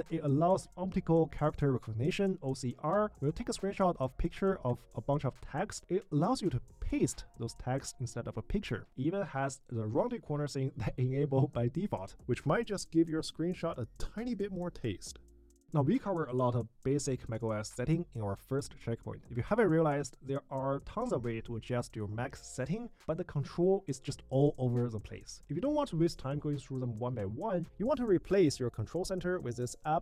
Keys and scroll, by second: 6.1 super+v.